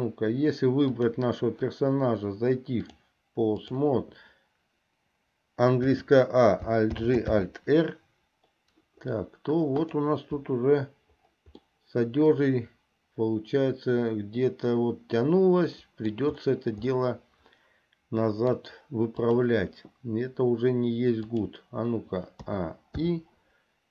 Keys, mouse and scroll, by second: 1.0 click, 2.9-3.9 drag, 6.0 a, 7.1 alt+g, 7.6 alt+r, 10.0 click, 11.9-16.4 middle drag, 17.2-18.8 middle drag, 19.4 click, 21.3 click, 22.7 a, 23.4 i.